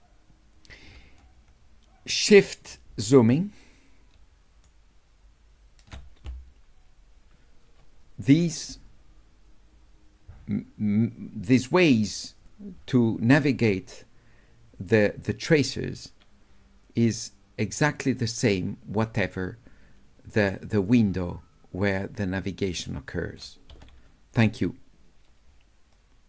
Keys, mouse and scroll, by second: 3.0-4.6 shift+right drag, 17.0-20.4 drag, 20.9 click, 22.0-23.4 drag.